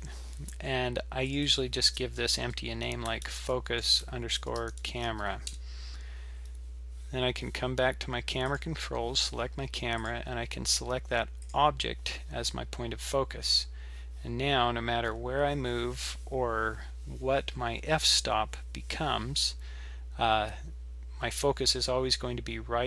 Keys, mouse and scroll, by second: 1.3 click, 1.5 click, 8.5 click, 10.0 click.